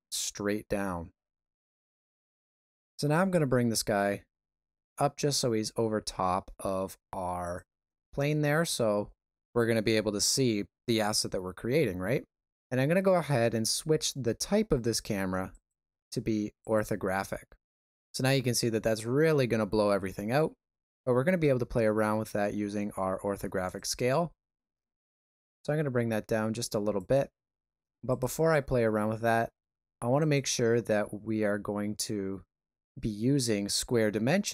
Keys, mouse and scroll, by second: 1.9 ctrl+middle click, 3.4 g, 8.3 shift+middle click, 8.9 middle click, 15.5 click, 23.7 click, 26.9 shift+click, 30.2 click.